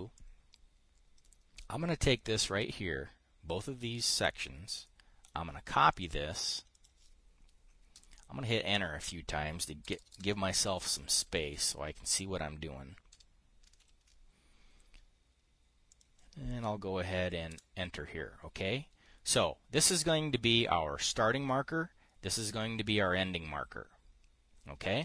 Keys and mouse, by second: 0.6-3.0 drag, 5.2 click, 6.4 click, 7.2 click, 8.4 Return, 10.3 Return, 11.1 Up, 11.4 Up, 11.9 Up, 12.1 Up, 14.3 ctrl+v, 18.0 Return.